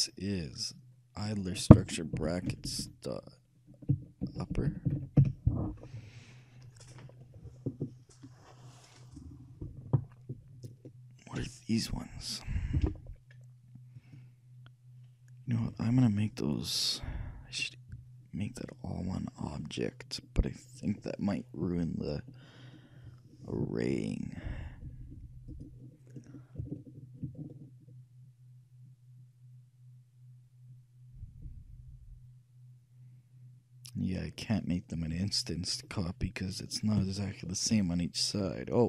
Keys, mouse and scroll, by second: 1.3-3.3 drag, 2.8 BackSpace, 2.9 BackSpace, 4.8 p, 11.4-13.3 drag, 14.0-15.8 drag, 15.9-17.9 drag, 25.7-27.3 drag, 35.9-38.8 middle drag.